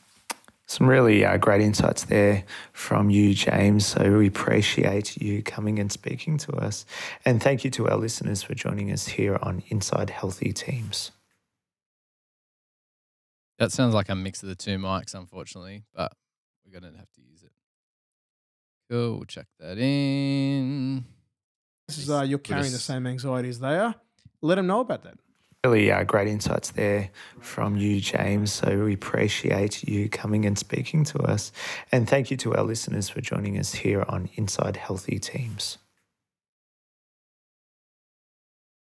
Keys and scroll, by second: 0.2 f, 4.7 Delete, 5.7 g, 7.3 F8, 17.9 F8, 20.6 Delete, 21.4 space, 22.1 super+], 22.2 super+], 22.3 super+], 23.6 F8, 25.4 F7, 26.8 Delete, 29.5 Delete, 31.2 f, 32.2 super+[, 32.4 super+[, 32.5 super+[, 32.7 super+[, 33.1 super+[.